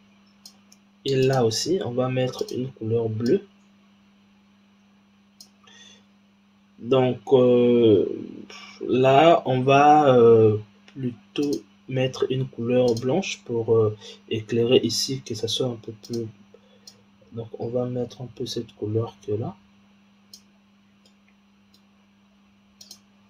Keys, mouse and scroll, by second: 1.1 click, 2.3 click, 6.3-7.1 scroll up 4, 7.1-8.6 scroll down 1, 9.4-11.3 scroll down 2, 11.3 click, 12.7 click, 15.9 click, 21.1-22.7 middle drag, 22.7 click.